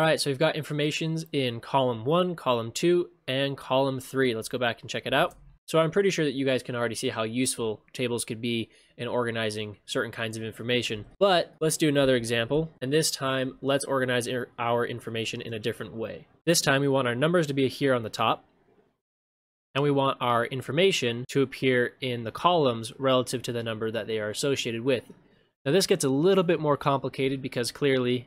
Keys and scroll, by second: 5.3 ctrl+shift+space, 11.1 ctrl+shift+space, 16.4 ctrl+c, 16.4 ctrl+v.